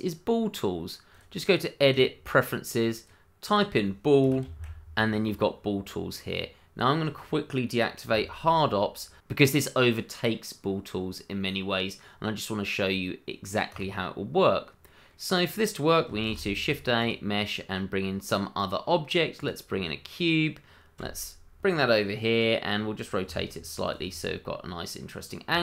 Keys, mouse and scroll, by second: 1.1 click, 4.2 b, 4.4 o, 8.1 h, 8.2 a, 13.7 click, 14.6 scroll down 1, 14.8 middle click, 15.3 click, 16.2 shift+a, 17.0 click, 19.4 click, 19.7-20.7 scroll down 1, 20.7 s, 21.2 click, 21.6 g, 22.5 click, 22.7-23.2 scroll up 1, 23.2 r, 23.8 click, 24.2 middle click, 25.1-25.5 scroll up 1, 25.5 shift+middle click.